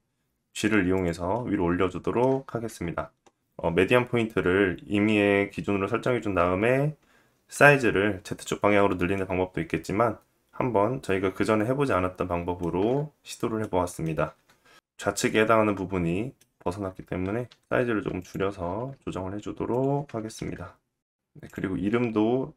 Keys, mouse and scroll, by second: 0.2 g, 2.3-21.1 middle drag, 3.9 Tab, 11.9 alt+z, 16.1 s, 16.9 g, 18.0 KP_1, 18.4 KP_3, 19.2 s, 21.1-22.5 drag, 21.5 middle drag.